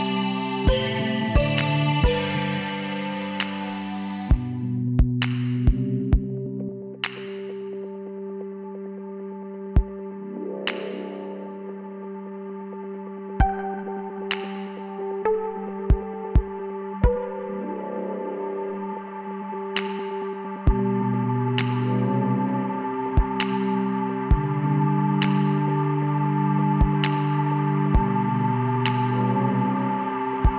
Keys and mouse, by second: 3.4-4.6 middle drag, 5.2-8.9 drag, 8.0 w, 14.4-17.4 drag, 16.4 w, 22.5-25.2 drag, 24.4 w, 29.6-30.5 middle drag.